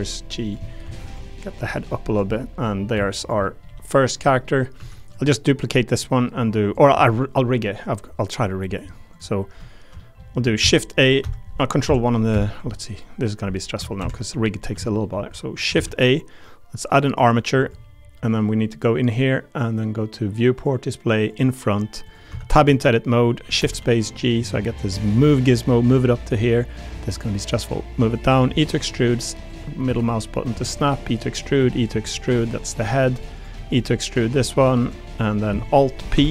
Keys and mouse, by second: 0.6 click, 0.8 2, 1.1 click, 2.3 middle click, 2.9 1, 3.2 click, 3.7 g, 4.0 click, 4.3 click, 4.7 Tab, 5.5 click, 6.1 click, 6.7 click, 10.0 click, 10.6 shift+a, 14.8 shift+click, 15.7 shift+a, 17.6 click, 20.5 click, 21.3 click, 22.0 click, 22.3 Tab, 22.5 a, 22.7 click, 23.6 shift+space, 25.0 click, 26.9-28.3 drag, 28.4 e, 29.5 click, 29.8 e, 30.4 middle click, 31.0 click, 31.6 e, 31.9 click, 32.6 click, 33.3 click, 33.5 e, 34.8 click, 35.2 click, 36.1 alt+p.